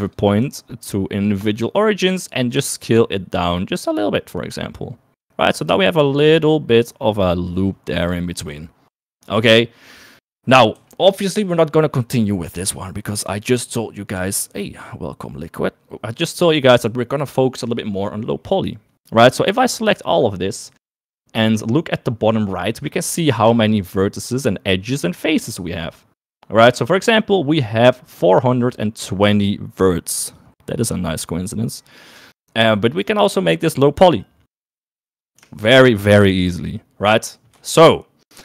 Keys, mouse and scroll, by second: 0.3-1.8 drag, 2.7 s, 7.2-9.1 drag, 10.4 KP_1, 11.6 KP_3, 35.5 Tab, 37.9 shift+middle click.